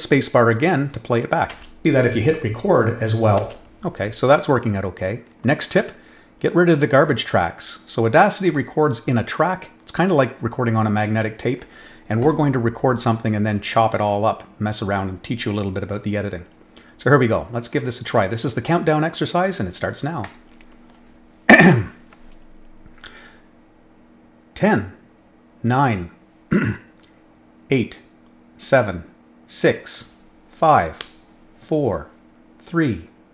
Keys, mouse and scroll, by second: 3.4 space, 9.9 click, 20.2 click.